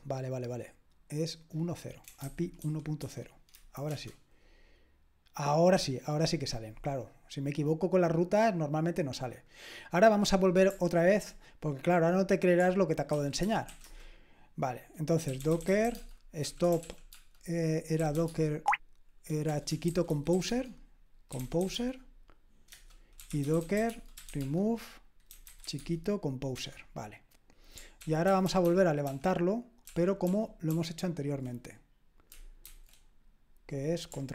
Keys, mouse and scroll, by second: 2.0-3.5 typing, 3.5 Delete, 3.9 Return, 4.8-5.5 typing, 9.5 click, 13.2-26.1 typing, 26.5 Return, 28.0 ctrl+p, 28.3 ctrl+p, 28.4 ctrl+p, 28.7-32.6 ctrl+p, 32.6 ctrl+c.